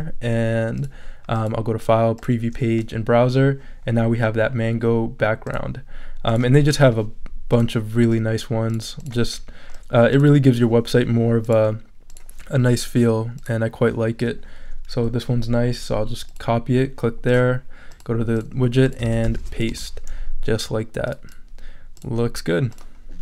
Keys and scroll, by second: 0.1 Return, 19.0 super+a, 19.4 super+v, 19.7 super+Return, 20.5 Return.